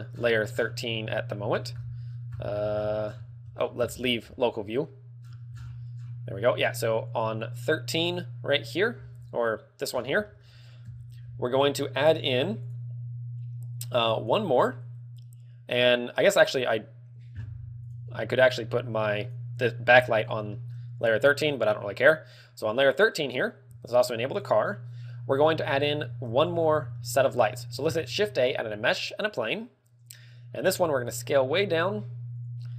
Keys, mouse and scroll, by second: 0.1-1.2 scroll down 18, 1.3 scroll up 3, 1.9 scroll down 1, 2.0-3.3 scroll up 21, 3.4-3.7 scroll down 7, 4.3 KP_Divide, 5.6 KP_Divide, 5.6-6.5 scroll down 18, 7.3 click, 7.3 scroll down 1, 9.5 click, 10.1-10.5 scroll down 9, 10.5 shift+middle click, 11.1 KP_7, 12.4 KP_7, 18.1 click, 19.4 click, 20.2 scroll down 6, 20.8 shift+middle click, 22.9 click, 25.0 shift+click, 25.9-26.4 scroll up 5, 26.4 a, 27.0 shift+c, 27.2 shift+middle click, 28.1 shift+a, 31.7 s.